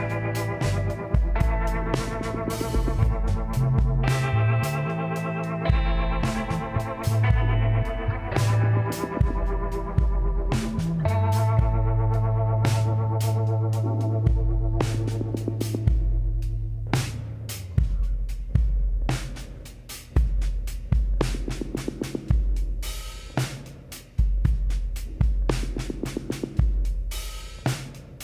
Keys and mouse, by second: 1.0 e, 2.6 g, 4.3 r, 6.4 click, 7.6 e, 10.6 z, 12.7-14.3 drag, 16.7-18.5 middle drag, 17.7 KP_7, 18.5 z, 23.5 KP_Divide.